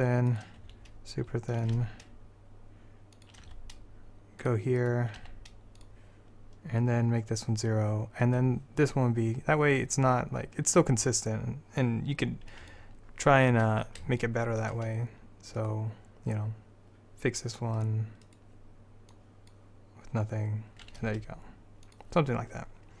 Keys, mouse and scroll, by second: 0.7 s, 1.9 g, 3.6 r, 4.9-6.8 drag, 5.3 g, 8.3 click, 12.5 middle click, 13.1 middle click, 13.9 middle click, 14.3 middle click, 15.7-17.9 middle drag, 17.9-19.2 drag, 19.2-21.1 middle drag, 21.1 g.